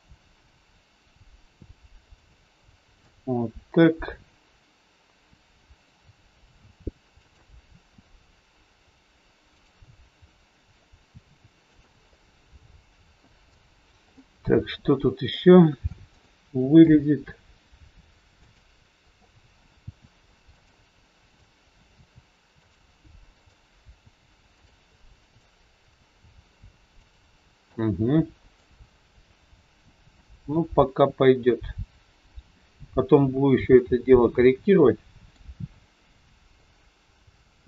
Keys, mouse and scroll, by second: 2.3 middle click, 3.2 scroll down 2, 5.3-5.7 scroll down 1, 5.7 click, 6.6 r, 9.6 click, 10.2 middle click, 11.1 r, 12.1 middle click, 13.6-14.2 scroll down 2, 14.2 middle click, 15.0 scroll up 2, 15.3 middle click, 16.2 shift+middle click, 17.6 scroll up 1, 18.3 click, 19.7 r, 21.2 click, 21.8 r, 23.3 click, 23.9 r, 25.2 click, 25.9 r, 27.7 middle click, 29.5-30.1 scroll down 1, 30.1 middle click, 32.8-33.3 scroll down 2, 33.8 middle click, 33.8 scroll down 2, 35.7 scroll down 1, 36.6 middle click.